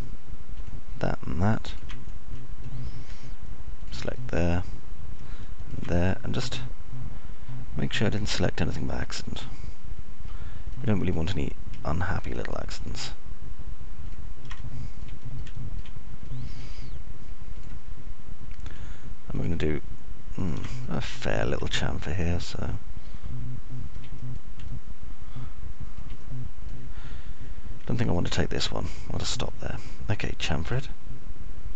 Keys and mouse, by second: 0.0-1.0 ctrl+middle drag, 2.5-3.5 ctrl+middle drag, 4.5 middle click, 5.6 ctrl+click, 6.0 middle click, 7.5 ctrl+click, 8.1-11.1 alt+middle drag, 15.8 ctrl+click, 16.5 alt+middle click, 17.0 middle click, 17.5 alt+middle click, 18.0 middle click, 22.1 ctrl+click, 23.1-26.0 middle drag, 26.6-27.8 alt+middle drag, 28.0 middle click, 30.6 ctrl+click, 31.1 middle click.